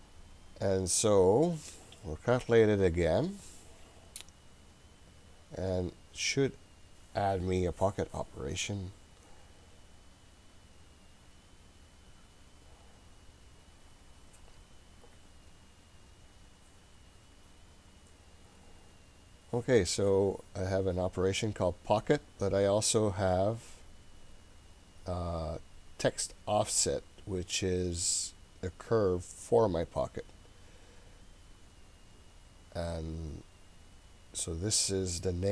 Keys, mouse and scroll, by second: 0.9 scroll down 1, 2.5-17.4 drag.